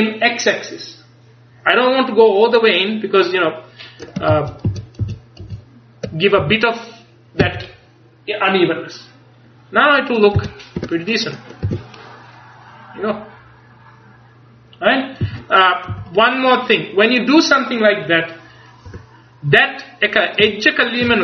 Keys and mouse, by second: 4.4 ctrl+z, 4.7 ctrl+z, 6.5 ctrl+z, 6.5 a, 10.5 z, 10.9 Tab, 11.8 a, 15.7 z, 16.0 z, 19.0 Tab.